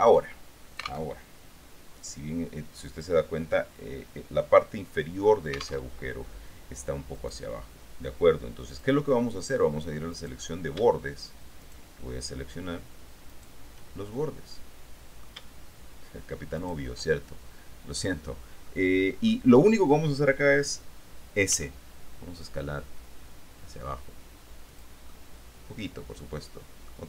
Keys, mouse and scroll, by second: 1.3 alt+Tab, 6.0 alt+Tab, 7.6 right click, 10.3 right click, 11.9 shift+right click, 13.5 shift+right click, 14.2-15.6 shift+middle drag, 17.3-19.6 shift+middle drag, 21.7 s, 24.9 click, 25.2-27.0 middle drag.